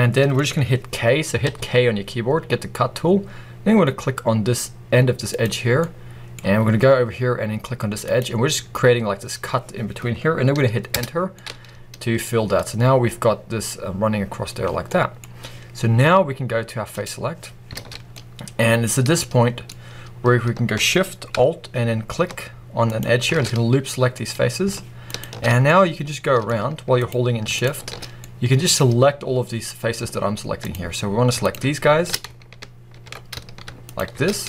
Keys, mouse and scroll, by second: 1.3 k, 5.7 middle click, 11.2 middle click, 16.8 click, 17.6 alt+a, 18.0-22.1 middle drag, 22.8 alt+shift+click, 24.3 middle click, 25.0 shift+click, 25.6-26.9 middle drag, 26.9 shift+click, 27.4 alt+shift+click, 28.1-29.3 middle drag, 29.3 scroll down 2, 29.5 middle click, 29.9-30.5 scroll up 2, 30.5 shift+click, 31.3 alt+shift+click, 32.9 ctrl+z, 33.7 alt+shift+click.